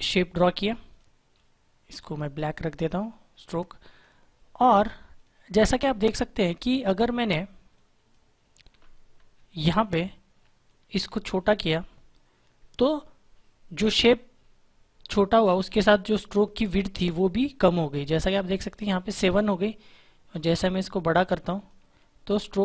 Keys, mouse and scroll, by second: 10.6 shift+click, 20.8 shift+click.